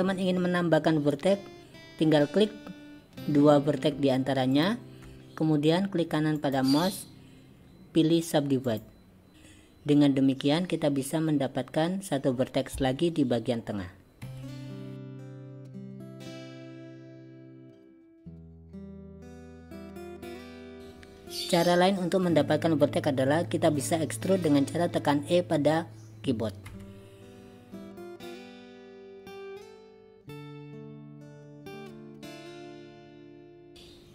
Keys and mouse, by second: 6.4-8.9 right drag, 14.3 g, 17.4 g, 18.6 click, 19.7 click, 20.3 g, 26.8 e, 29.3 alt+s, 31.0 alt+s, 32.3 Tab, 32.9-33.6 drag.